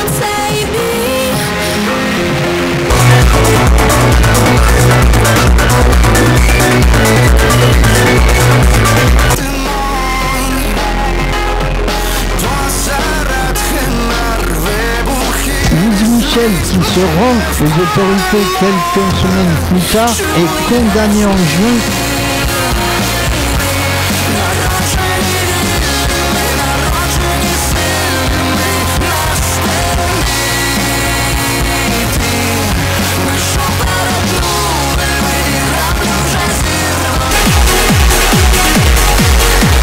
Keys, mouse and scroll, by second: 9.1 Page_Down, 21.8 Page_Down.